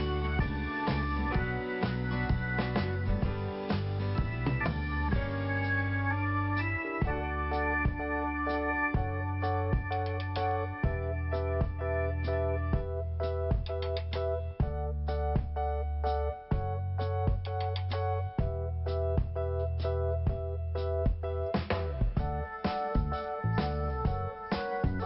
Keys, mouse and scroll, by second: 1.0 click, 2.1 click, 3.2 click, 4.1 scroll down 1, 4.6 scroll up 2, 5.6 click, 6.7 click, 8.9 click, 11.4-11.8 scroll up 1, 13.1 click, 15.4 scroll down 1, 15.9 scroll up 2, 17.6 click, 19.6 click, 22.8 i, 23.6 scroll up 1.